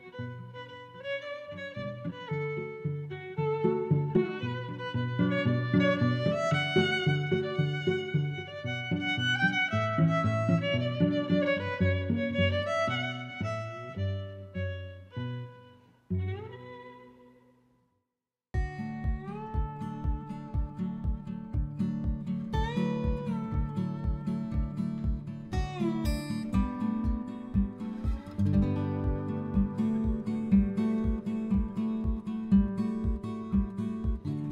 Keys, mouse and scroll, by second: 2.6 right click, 5.4 click, 6.2 middle click, 6.7 middle click, 7.4 click, 7.9 click, 12.7 click, 30.1 middle click, 31.1 middle click, 32.8 click.